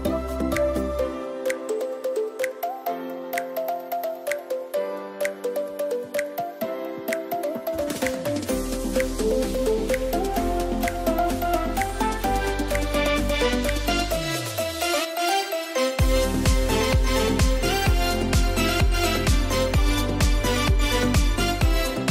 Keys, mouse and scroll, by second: 0.9 scroll up 1, 1.5-4.2 typing, 1.6 click, 3.2 scroll up 1, 3.6 click, 4.2 click, 5.2 ], 5.9 click, 6.2-6.5 scroll down 2, 6.8 scroll up 1, 7.3 ], 7.6 click, 10.9 scroll down 1, 11.7 scroll up 1, 12.2-12.5 typing, 12.3 scroll up 1, 13.0-14.5 drag, 14.5 scroll down 1, 14.6 [, 14.8 scroll up 1, 15.4 [, 15.6 click, 16.4-18.6 typing, 16.9 click, 19.3 alt+click, 19.9-20.3 typing, 21.5-22.1 typing.